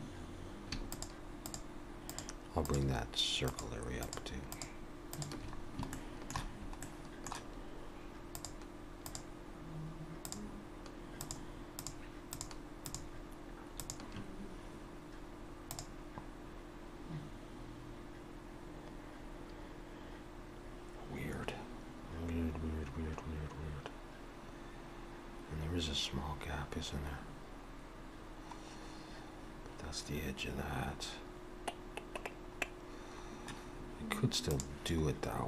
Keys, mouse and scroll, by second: 0.9 shift+click, 2.0-5.6 shift+click, 5.6 scroll down 1, 5.9 shift+middle click, 6.8 shift+middle click, 8.4-15.9 shift+click.